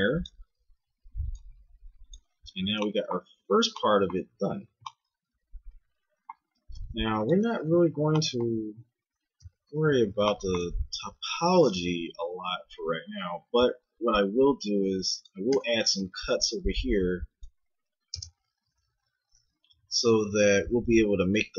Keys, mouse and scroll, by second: 0.7-2.9 middle drag, 2.9 click, 3.1 z, 7.8 ctrl+Tab, 9.4 KP_1, 12.2 z, 13.5 k, 18.8 a, 19.7 k.